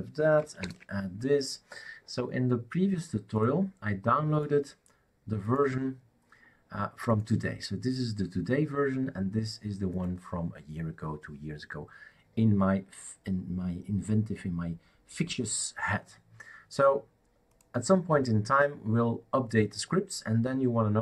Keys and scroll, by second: 0.6 shift+super+Return.